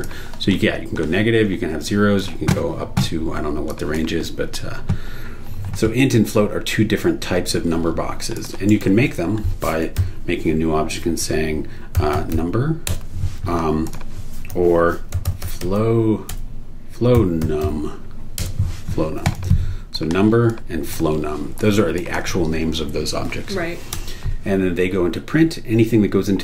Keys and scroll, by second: 8.7 super+e, 10.0 n, 11.7-12.8 typing, 12.8 Return, 14.5-18.1 typing, 18.4 Return, 23.9 BackSpace.